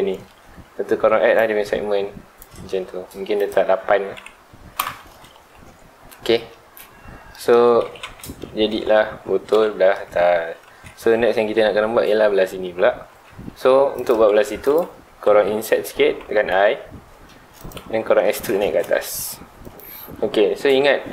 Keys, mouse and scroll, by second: 1.3-4.8 drag, 4.8 KP_Enter, 6.5-7.8 middle drag, 7.8 alt+a, 8.0 Tab, 8.2-8.7 middle drag, 8.7 alt+a, 8.8-9.5 scroll down 2, 9.5 KP_1, 13.2 Tab, 13.4 middle drag, 13.7 scroll up 2, 13.9 click, 14.2 Tab, 14.5 3, 14.6 click, 15.0-15.8 scroll up 2, 15.8 i, 17.7 click, 17.8 scroll down 1, 18.0 middle click, 18.3 e, 19.7 click.